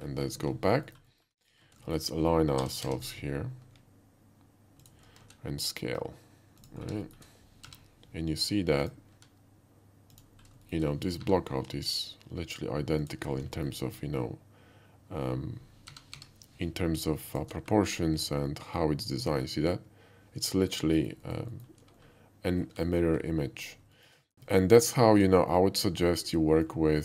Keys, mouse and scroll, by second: 0.9 alt+middle click, 1.1 alt+middle drag, 1.4 KP_5, 1.8 shift+middle click, 1.9 middle click, 1.9 shift+KP_5, 2.6 r, 2.9 z, 4.9 ctrl+click, 5.1 s, 6.6 click, 6.8 middle click, 7.1 shift+middle click, 7.7 g, 8.9 click, 9.1 s, 10.1 click, 10.7 shift+middle click, 11.2 g, 11.8 shift+g, 13.0 click, 13.6 alt+middle click, 15.9 g, 16.2 y, 17.3 click, 17.7 shift+middle click, 18.2 shift+middle click, 18.5-20.7 shift+middle drag, 21.0 alt+middle click, 21.3 alt+middle click, 21.5 alt+middle click, 22.9 alt+middle click, 24.0 shift+middle click, 25.2 shift+click, 25.6-26.7 shift+middle drag.